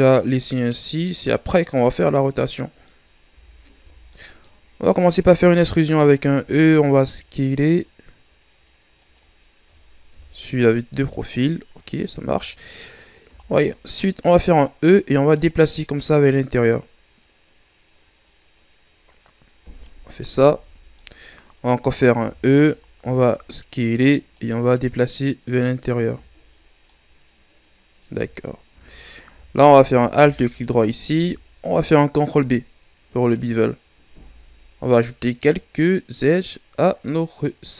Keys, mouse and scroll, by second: 2.1 scroll down 1, 2.3 middle click, 3.0 scroll up 1, 3.3 z, 3.8 z, 4.1 middle click, 4.9 scroll up 1, 5.2 e, 6.4 s, 10.1 KP_3, 11.4-13.2 middle drag, 13.2 e, 14.9-17.9 drag, 20.6 z, 20.9-22.1 middle drag, 22.1 e, 22.9 s, 24.8-26.0 drag, 26.0 z, 26.8-28.1 middle drag, 28.1 scroll up 1, 28.1 z, 28.7 z, 29.8 z, 30.4 alt+right click, 31.1 z, 32.2 ctrl+b.